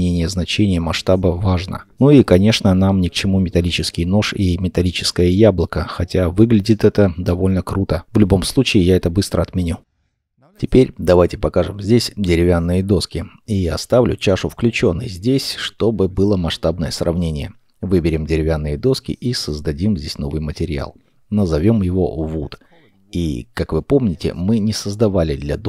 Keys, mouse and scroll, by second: 1.6-2.0 scroll down 1, 2.0 middle click, 2.8 ctrl+z, 3.2 ctrl+z, 3.4 ctrl+z, 3.5 ctrl+z, 4.0-4.5 ctrl+scroll up 3, 4.4 middle click, 5.7 shift+middle click, 12.9 middle click, 21.4 0, 22.0 Return, 22.1 d.